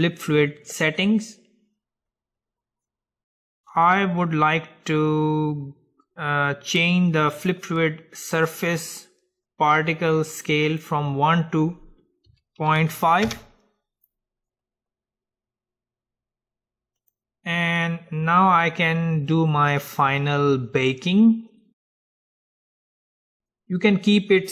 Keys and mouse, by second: 1.1-6.6 middle drag, 7.5-9.5 drag, 10.9-13.4 drag, 17.1-19.2 drag, 17.9-24.5 middle drag, 23.3-24.5 drag.